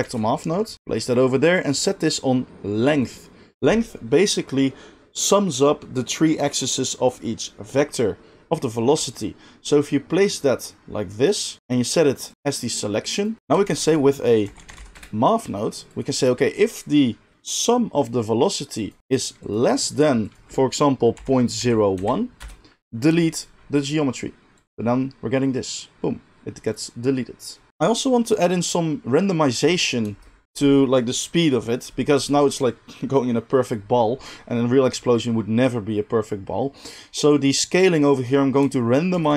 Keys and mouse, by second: 0.0 shift+a, 0.7-1.7 middle drag, 3.1-13.4 drag, 13.4-18.9 shift+middle drag, 13.4 g, 13.4 shift+a, 13.6 shift+a, 18.9-39.3 drag, 24.6 space, 27.7 space, 29.5 space, 30.0 space, 39.1 shift+a.